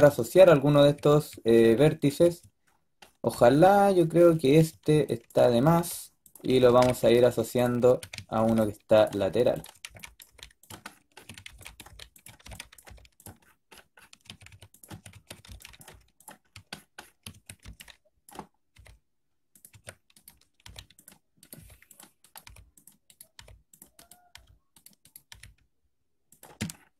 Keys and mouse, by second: 4.1 a, 4.4 a, 4.7 b, 5.5 g, 6.5-10.1 typing, 11.2-12.7 drag, 11.2-12.7 typing, 14.1-15.8 typing, 17.2 a, 17.5 b, 18.6-25.2 typing, 25.2-26.9 drag.